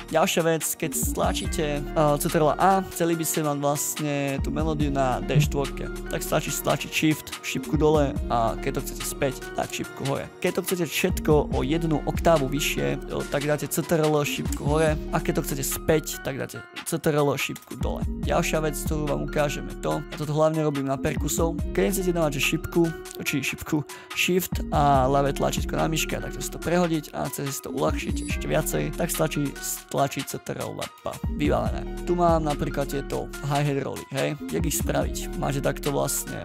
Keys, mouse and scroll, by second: 0.0 right click, 1.1-1.9 scroll up 2, 1.9 ctrl+a, 6.8 shift+Down, 10.8 shift+Up, 13.0 alt+Up, 14.5 ctrl+Up, 17.5 ctrl+Down, 18.1-19.4 scroll down 3, 19.5 scroll down 1, 19.6-20.8 scroll up 2, 21.6 scroll up 1, 21.6-22.0 scroll down 5, 24.1 shift+click, 25.5 shift+click, 30.9 ctrl+b, 31.9 ctrl+scroll up 5, 32.1-32.5 ctrl+scroll down 1, 32.5-33.5 ctrl+scroll up 8, 34.4 right click, 35.3 Delete.